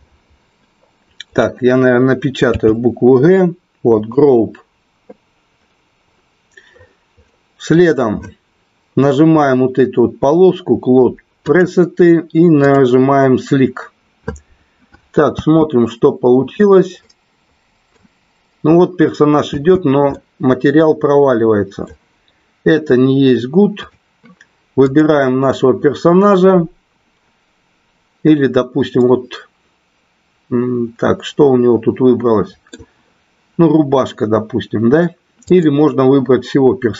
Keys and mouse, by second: 11.5-13.8 drag, 15.4 space, 17.0 middle click, 19.5 space, 20.0-21.9 middle drag, 24.9 click, 28.9-32.8 middle drag.